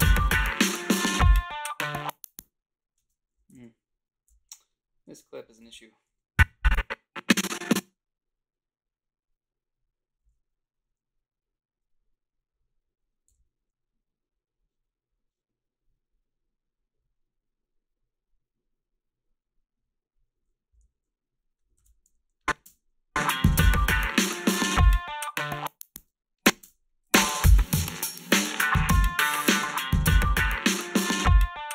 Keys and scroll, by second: 3.0 space, 5.6 ctrl+b, 13.3 f, 21.8 ctrl+r, 22.6 space, 26.0 space, 26.6 space.